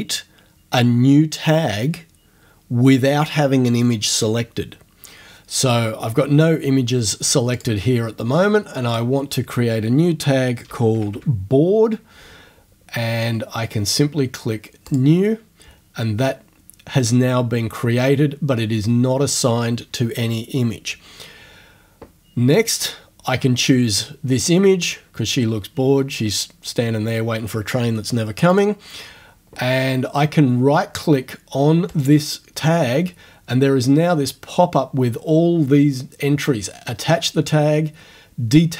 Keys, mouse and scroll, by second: 7.6 click, 8.9 click, 10.1-11.6 typing, 14.9 click, 28.5 click, 32.0 right click.